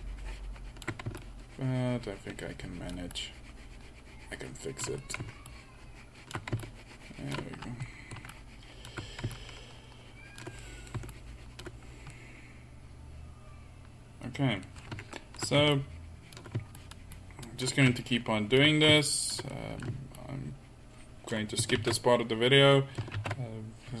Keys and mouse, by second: 10.6 middle drag, 12.2-13.2 middle drag, 13.9-14.6 middle drag, 14.8-15.2 middle drag, 15.8-19.7 middle drag, 21.2-22.4 drag, 22.4 ctrl+z, 22.7 middle drag, 23.7 ctrl+z.